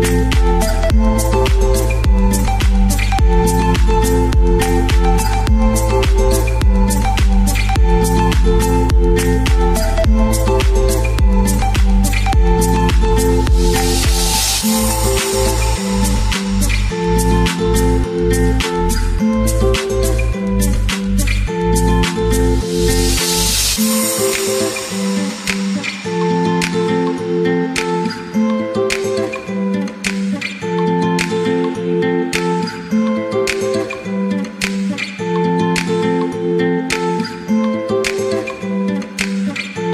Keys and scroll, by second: 6.4 Page_Down, 7.1 Page_Down, 8.5-9.7 typing, 20.5-22.1 typing, 24.4-25.3 typing.